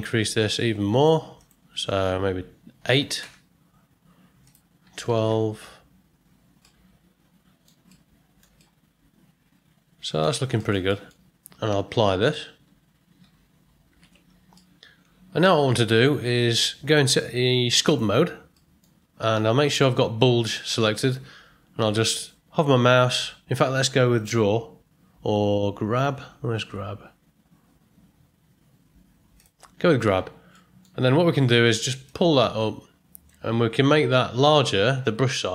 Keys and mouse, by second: 1.3-6.2 drag, 6.6 middle drag, 6.8 middle click, 7.9-8.4 ctrl+middle drag, 8.6-10.2 middle drag, 10.5 ctrl+middle click, 10.8 shift+middle drag, 13.9 ctrl+a, 14.5-15.4 middle drag, 16.8 Tab, 18.5 middle click, 24.2 click, 29.3 click, 30.5 middle click, 32.0-33.2 drag, 35.3 f.